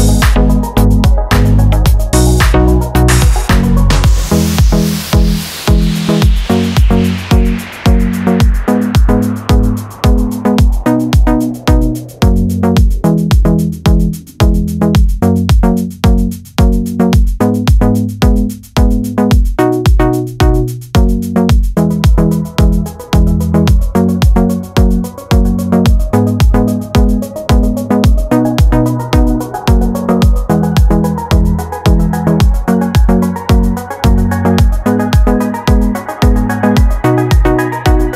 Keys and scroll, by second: 32.8 d, 35.0 super+c.